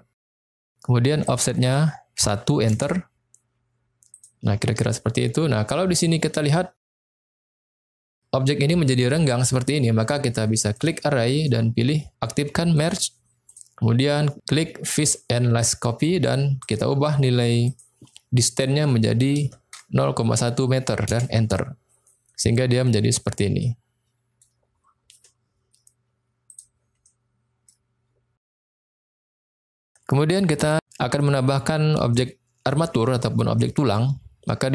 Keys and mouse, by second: 1.2-3.1 drag, 4.2 click, 5.7 middle click, 6.7 middle click, 10.8 click, 12.7 click, 13.5 click, 14.9 click, 16.6-22.0 drag, 22.3-22.9 middle drag, 23.6-24.4 middle drag, 26.5 click, 27.1 middle click, 29.9 middle click, 31.1 middle click, 32.1-33.1 middle drag, 33.4-34.0 middle drag, 34.4 middle click.